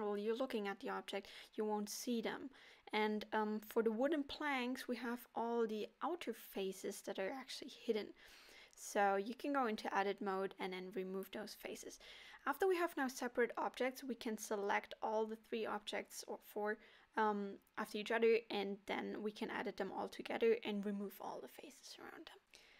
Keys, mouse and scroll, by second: 0.0 click, 0.8 middle click, 2.6 click, 3.8 Tab, 4.2 middle click, 4.7 scroll up 2, 6.0 click, 6.5 shift+click, 7.2 shift+click, 7.5 middle click, 8.5 shift+click, 9.2 x, 10.7 middle click, 11.1 Tab, 12.3 click, 12.8 shift+click, 13.8 Tab, 14.5 click, 14.9 shift+click, 15.0 shift+click, 15.7 middle click, 16.4 shift+click, 17.3 shift+click, 17.4 middle click, 17.7 shift+click, 18.1 shift+click, 19.0 middle click, 19.8 shift+click, 20.3 shift+click, 20.8 middle click, 22.2 x.